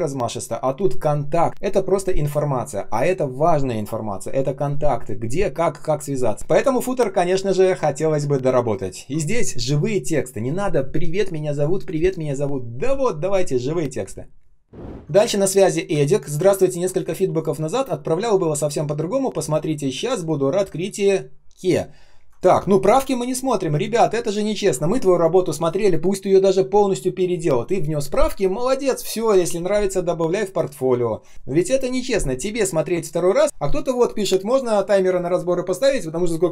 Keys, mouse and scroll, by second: 14.8 ctrl+scroll up 1, 16.3 ctrl+scroll down 1, 17.0 space, 17.5 space, 17.5 space, 20.2 ctrl+scroll down 1, 20.5 ctrl+scroll up 1, 21.5 ctrl+scroll down 1, 22.2 ctrl+click, 23.9 ctrl+scroll up 1, 24.4 ctrl+scroll down 1, 32.4 space, 32.9 space, 33.2 ctrl+scroll up 1.